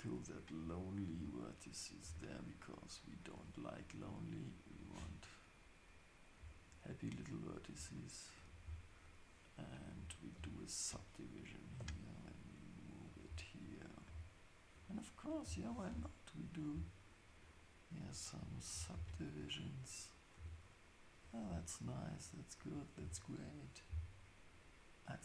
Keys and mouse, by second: 0.7-4.9 drag, 2.0 g, 5.0 Tab, 7.5 click, 8.3 shift+click, 10.3 ctrl+shift+s, 11.6 click, 11.8 g, 13.9 click, 15.7 ctrl+shift+s, 18.9 ctrl+shift+s, 19.8 click, 20.4 g, 22.6 click.